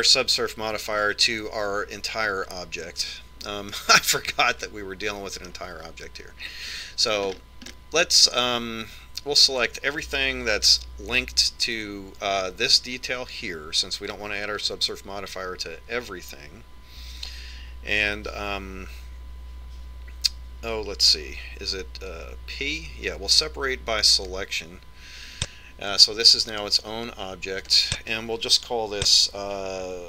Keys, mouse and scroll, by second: 4.9-6.6 middle drag, 7.9 Tab, 12.0 l, 23.4 p, 27.9-30.0 drag.